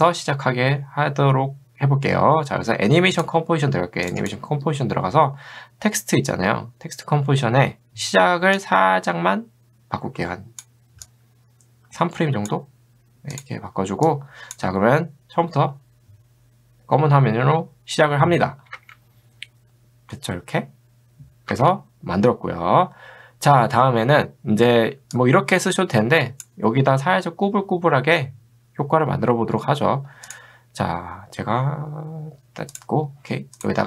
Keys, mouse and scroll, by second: 3.2 click, 8.6-12.5 drag, 14.1 click, 18.8 space, 21.5 space, 24.0 middle click, 24.0 scroll down 2, 25.2-26.7 drag, 32.7 click.